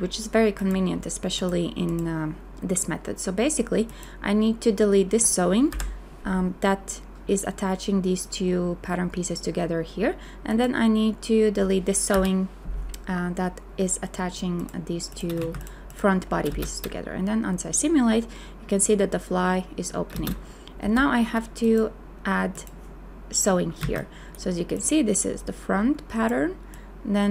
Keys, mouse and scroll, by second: 5.7 Delete, 12.1 Delete, 15.4 a, 16.5 space, 20.8 n, 23.8 a.